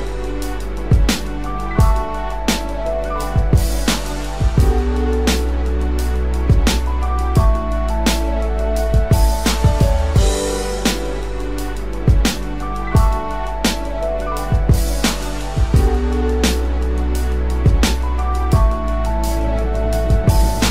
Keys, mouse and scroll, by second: 3.5 double click, 4.3-5.4 typing.